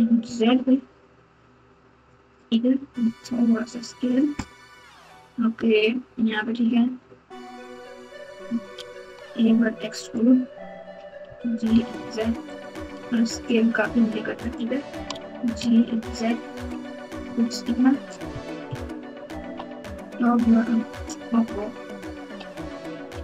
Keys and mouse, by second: 3.0 s, 9.0 e, 11.2 g, 12.9 s, 15.0 g, 17.2 Tab, 17.9 Tab, 18.6 KP_2, 19.4 KP_7, 19.8 KP_9, 22.3 ctrl+z, 23.1 ctrl+z.